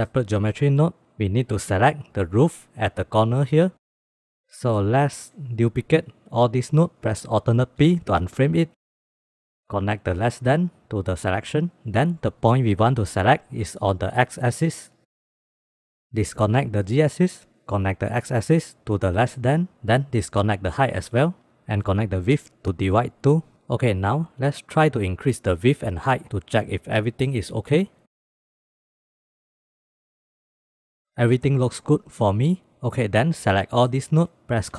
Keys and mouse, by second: 0.4-0.9 drag, 1.3-2.1 drag, 4.0 KP_Add, 4.4 middle click, 4.9 click, 5.9 shift+d, 8.2 alt+p, 9.0 click, 9.5 click, 9.9-11.5 drag, 15.4 click, 15.7 click, 16.1 click, 16.7 ctrl+click, 17.6-19.5 drag, 19.9 ctrl+click, 21.3-23.1 drag, 25.6 click, 26.1 click, 28.0 click, 28.4-30.3 drag, 31.2 click, 31.4-32.8 drag, 33.0 middle drag, 33.4 click.